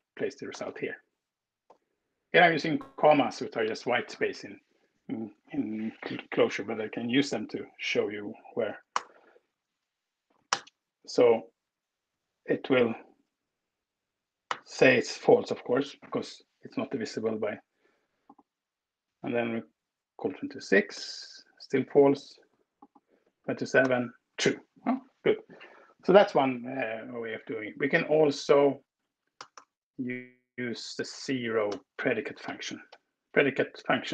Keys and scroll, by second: 0.6 typing, 1.6 ,, 8.8 alt+Return, 10.3 ctrl+alt+Return, 11.8 Escape, 12.2 Right, 12.3 Right, 12.6 Right, 14.4 alt+Return, 20.8 alt+Return, 23.8 alt+Return, 27.0 Escape, 27.7 Left, 28.2 Left, 28.5 Right, 29.2 BackSpace, 30.7 Left, 30.8-32.6 typing.